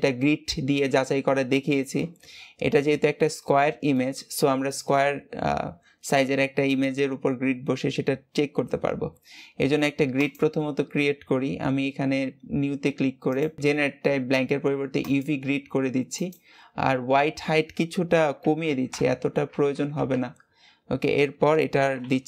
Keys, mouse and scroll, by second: 2.1-3.4 scroll up 2, 3.4-6.7 shift+middle drag, 10.1-13.2 drag.